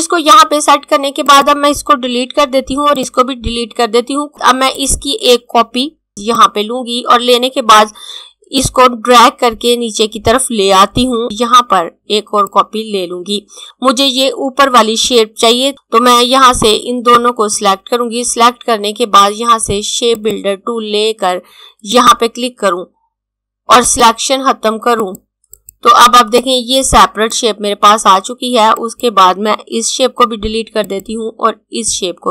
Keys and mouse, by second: 2.4 Delete, 2.9 click, 3.3 Delete, 4.8 click, 8.5 click, 17.1 click, 20.2 click, 29.7 Delete, 30.4 click, 31.6 Delete.